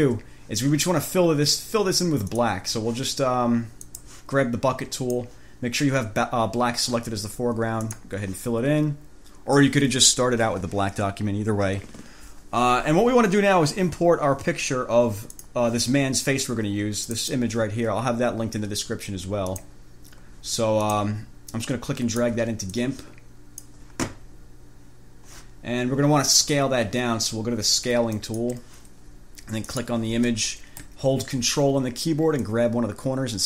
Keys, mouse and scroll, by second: 2.5 click, 4.1 click, 5.2 click, 8.1 click, 15.6 click, 17.3 click, 19.7 click, 21.1 click, 21.8-22.7 drag, 23.0-24.1 drag, 28.3 click, 29.9 click, 32.6-33.4 ctrl+drag.